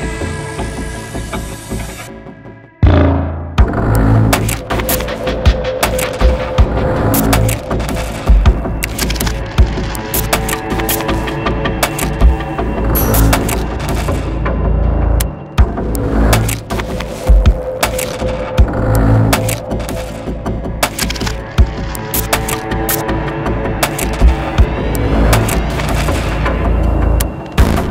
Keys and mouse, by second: 4.8 click, 5.3 middle click, 5.4 click, 7.8-9.5 drag, 11.8-12.8 drag, 13.1-14.6 drag, 15.3-16.3 drag, 17.4-20.1 drag, 21.6-22.6 drag, 22.7-26.6 drag, 26.9-27.9 drag.